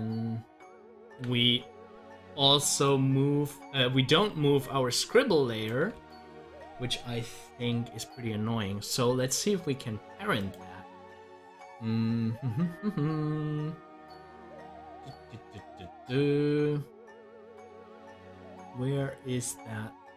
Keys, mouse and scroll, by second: 1.9 scroll up 1, 2.5 scroll up 1, 5.9 ctrl+z, 10.3 click.